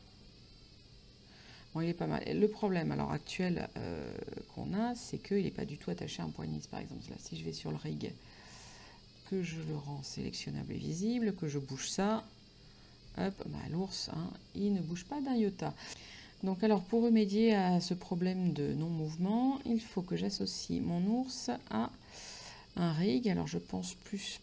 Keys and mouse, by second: 4.8 middle click, 7.3 click, 9.2 click, 11.1 right click, 12.4 g, 13.2 right click.